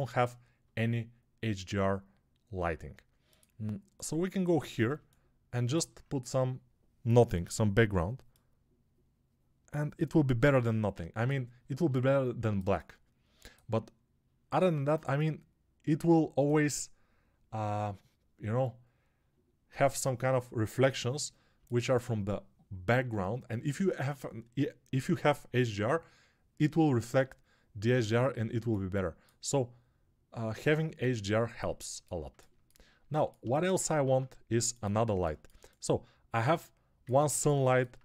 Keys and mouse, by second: 32.7-38.0 alt+right drag, 33.9 ctrl+Tab.